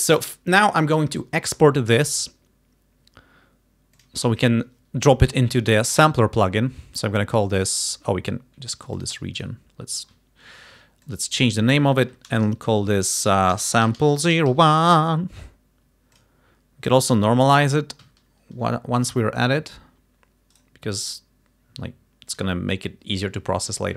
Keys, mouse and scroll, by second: 1.5 right click, 4.0 click, 9.0 ctrl+click, 9.4 ctrl+right click, 11.1 click, 13.3-15.1 typing, 16.2 click, 18.1 alt+3, 19.1 alt+click, 20.6 right click, 22.4 click.